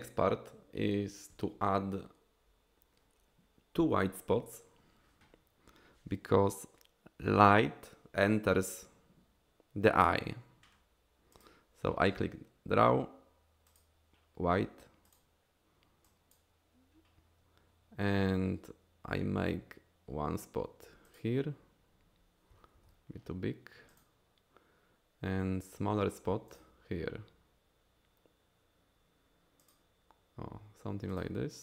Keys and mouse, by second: 11.3 click, 15.1 click, 16.1 click, 21.1 click, 22.7 ctrl+z, 23.9 click, 26.5 click, 29.6 click, 31.1 click.